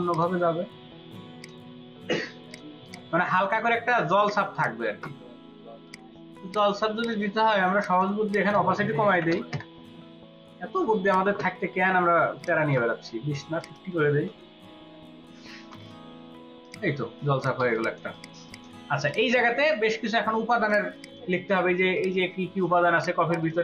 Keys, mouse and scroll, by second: 2.8 double click, 8.2 double click, 9.1 typing, 9.5 Return, 14.3 typing, 15.4 typing, 15.7 Return, 17.1 ctrl+space, 17.3 ctrl+alt+click, 18.1 double click, 18.7 space, 20.2 space, 20.6 ctrl+alt+click, 21.4 space, 21.9 ctrl+click, 22.9 ctrl+alt+click, 23.4 ctrl+alt+click.